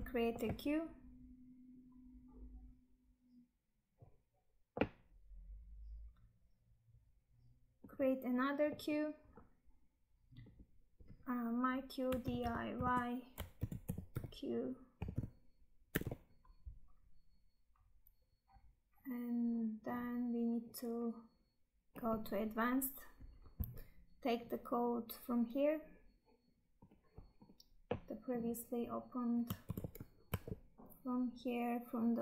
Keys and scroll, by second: 29.6 ctrl+c, 30.5 Tab.